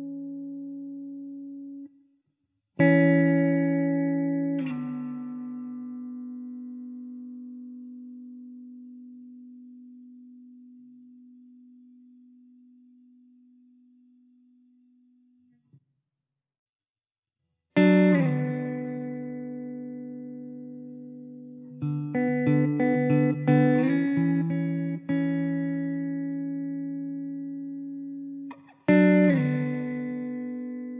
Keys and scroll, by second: 1.2 shift+a, 14.5 Tab, 15.3 `, 16.5 Tab, 16.9 s, 21.4 Tab, 21.8 3, 25.6 Tab, 26.0 s, 27.1 Tab.